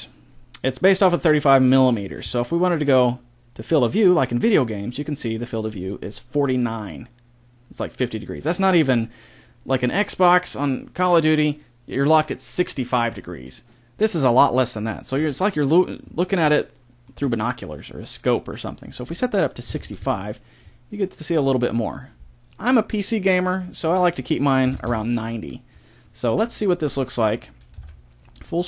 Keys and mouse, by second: 15.1 KP_0, 16.0-20.0 middle drag, 20.0 click, 24.8-25.9 drag, 27.7 ctrl+Up.